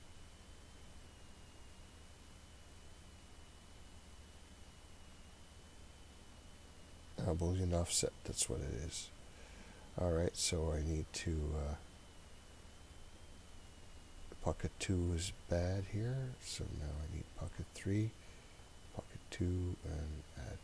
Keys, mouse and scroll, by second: 7.2 click, 13.7 click, 14.7 click, 15.8 click, 16.8 click, 17.5-18.7 scroll up 3, 18.7 click, 18.7 scroll up 1, 19.4 click.